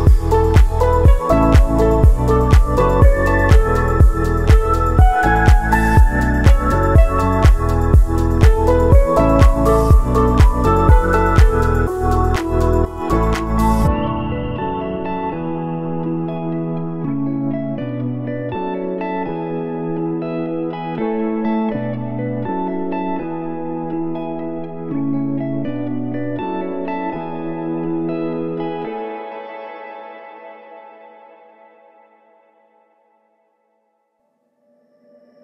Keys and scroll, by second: 1.5 ctrl+z, 2.7 ctrl+c, 3.0 ctrl+v, 3.8 ctrl+s, 10.0 ctrl+s, 11.4 ctrl+c, 12.3 ctrl+v, 13.0 ctrl+c, 14.7 ctrl+v, 31.3 ctrl+s, 33.6 space.